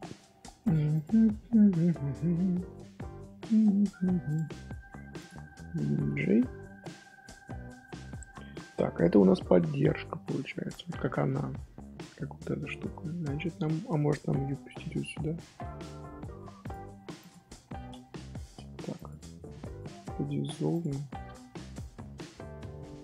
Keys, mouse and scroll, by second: 0.6 click, 0.9 click, 1.3 scroll up 1, 1.3 middle drag, 1.6 Tab, 2.2-3.2 middle drag, 3.2 scroll down 1, 3.3 scroll up 1, 3.5 middle click, 4.2 click, 4.7-5.1 scroll up 2, 5.1 shift+click, 6.0 j, 6.6 middle click, 7.3 Tab, 8.4 shift+middle click, 8.6-9.2 scroll up 1, 9.2-9.7 scroll up 1, 9.7-12.7 middle drag, 12.7 scroll down 2, 12.9 middle click, 13.8-14.2 scroll up 3, 14.2-14.6 scroll down 1, 15.1-16.6 middle drag, 16.6 click, 17.2 shift+click, 18.3 j, 18.9 click, 20.9-21.8 middle drag, 21.8 1, 22.2-23.0 middle drag.